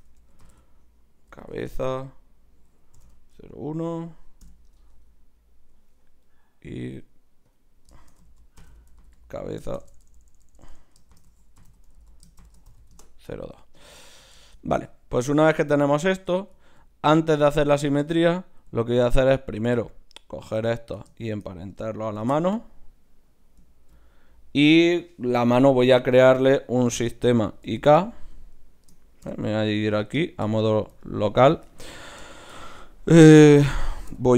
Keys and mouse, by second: 5.2-7.0 middle drag, 6.3-9.8 right drag, 7.5-9.8 drag, 9.8 BackSpace, 9.9 BackSpace, 14.0-16.4 middle drag, 15.3-17.7 right drag, 16.6-20.6 middle drag, 19.5-22.8 right drag, 22.2 ctrl+p, 23.7-25.7 middle drag, 26.0-27.8 right drag, 27.0 KP_7, 27.6 z, 29.2 KP_Divide, 29.8 z, 34.1 e.